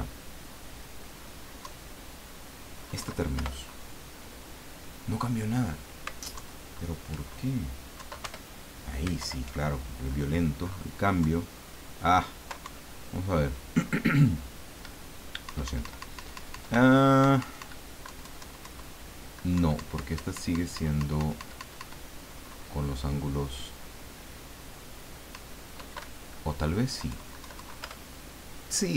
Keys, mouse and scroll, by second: 1.6 Down, 6.3 alt+Down, 8.0 Down, 8.7 Return, 9.2 alt+Down, 11.2 Down, 12.6 Up, 15.4 Up, 18.1 Down, 19.5 Up, 25.3 Up, 26.0 Down.